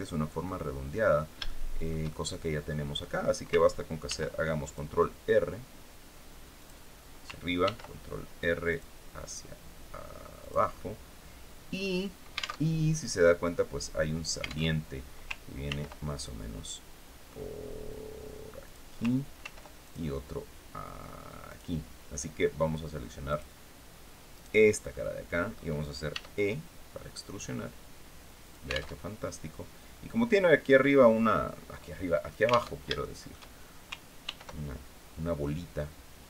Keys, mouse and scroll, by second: 0.1 middle click, 1.1 shift+middle click, 1.8 shift+middle click, 2.6 scroll up 2, 3.7 ctrl+r, 4.3 ctrl+click, 6.3 click, 7.3 ctrl+r, 8.4 click, 10.1 click, 12.3 alt+Tab, 14.3 alt+Tab, 15.3 ctrl+r, 15.8 ctrl+click, 18.3 click, 19.1 ctrl+r, 19.5 ctrl+click, 21.1 click, 22.9 click, 24.0 right click, 24.5 middle click, 25.7 e, 28.1 alt+click, 28.6 alt+Tab, 32.3 alt+Tab, 32.6 alt+shift+middle click, 32.7 alt+shift+scroll up 2, 33.9 ctrl+r.